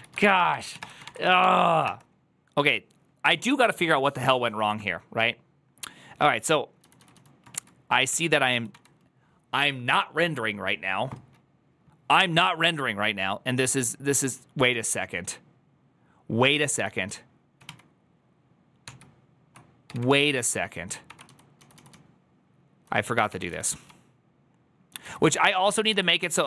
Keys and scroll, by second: 16.6 ctrl+w.